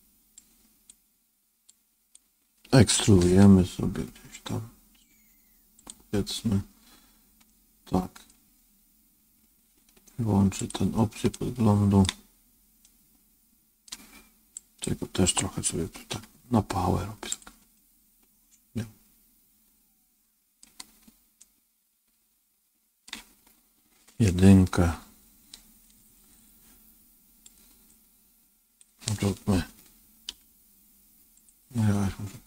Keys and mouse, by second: 0.3-2.1 drag, 3.1 e, 7.4 middle click, 10.5 click, 11.2 middle click, 12.7-13.8 middle drag, 14.6 click, 16.0 g, 17.6-20.5 middle drag, 21.3-23.0 middle drag, 24.6 KP_1, 27.3-30.2 drag, 30.2 g.